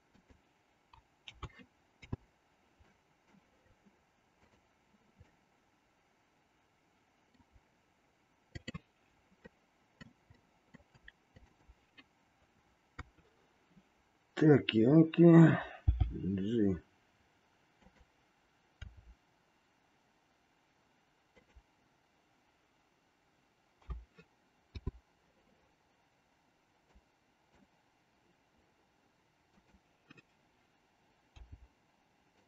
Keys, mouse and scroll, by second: 1.3 a, 2.1 i, 2.8 middle click, 4.3 click, 5.2-7.4 middle drag, 8.6-9.8 drag, 9.8 middle click, 10.4 middle click, 11.4-12.6 shift+drag, 12.9 KP_3, 15.8 g, 18.8 r, 23.8 a, 24.7 i, 26.9 click, 29.6 click, 31.3 g.